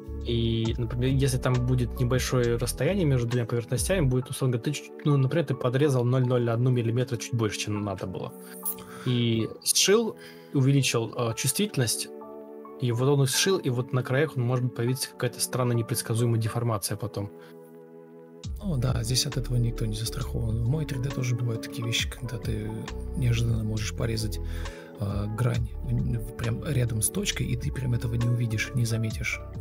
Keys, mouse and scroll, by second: 1.3 ctrl+Left, 1.5 ctrl+shift+Right, 2.3 Delete, 3.4 ctrl+z, 3.7 Delete, 4.1-6.9 typing, 7.7 Escape, 8.4 ctrl+space, 8.5 ctrl+m, 9.1 shift+r, 10.5 ctrl+space, 11.0 ctrl+shift+Left, 11.3 ctrl+shift+Right, 13.0 ctrl+u, 18.0 ctrl+click, 20.1 ctrl+space, 23.8 a, 24.1 Escape, 24.2 Escape, 24.5 a, 27.9 Right, 29.3 Right.